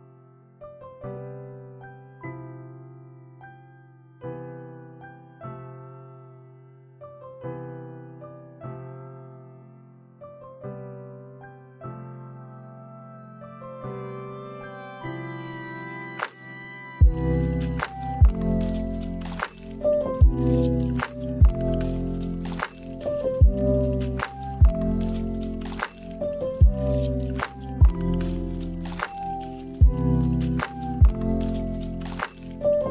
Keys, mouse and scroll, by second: 1.6 click, 2.7 click, 4.1 click, 5.3 click, 6.7 click, 7.7 click, 12.2 click, 14.0 middle click, 14.5 space, 16.7 space, 16.9 middle click, 17.1 scroll up 1, 17.2 middle click, 17.5-17.9 scroll down 3, 17.6 middle click, 17.9 middle click, 18.3 middle click, 18.4-18.9 scroll up 3, 18.6 middle click, 18.9 middle click, 20.1 middle click, 21.2-21.6 scroll up 3, 23.2 middle click, 23.2 click, 24.7 shift+right click, 30.6 click, 31.0 click, 31.6 Delete.